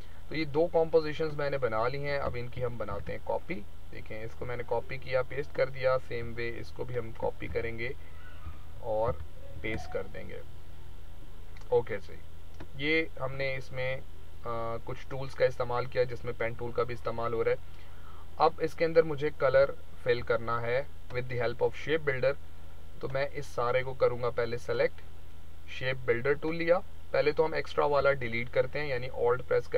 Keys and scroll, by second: 2.5 ctrl+c, 2.9 ctrl+v, 7.5 ctrl+x, 8.4 ctrl+z, 9.0 ctrl+c, 9.5 ctrl+v, 19.5 z.